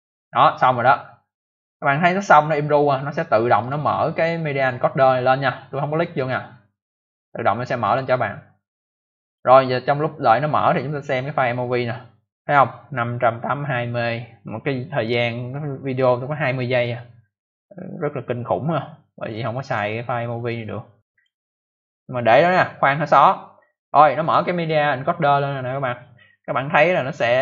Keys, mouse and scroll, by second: 3.5 click, 7.8 click, 7.9 click, 9.1 click, 9.3 click, 11.5 click, 11.6 click, 19.1 click, 19.2 click, 19.6 click, 19.7 double click, 21.0 double click, 21.1 double click, 24.1 click, 24.2 click.